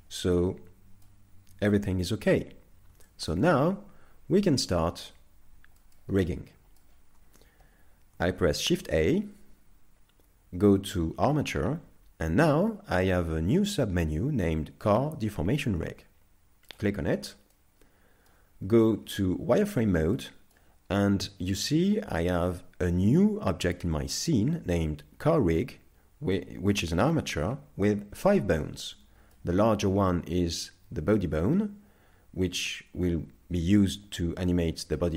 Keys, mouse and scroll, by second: 0.4 middle click, 1.4 scroll down 2, 3.1 shift+middle click, 3.3 shift+middle click, 4.3 KP_5, 5.4-5.8 scroll down 1, 5.8 shift+middle click, 6.2 middle click, 8.7 shift+a, 17.5 middle click, 19.0 z, 20.2 middle click, 20.9 scroll up 1, 26.4 middle click, 28.8 middle click.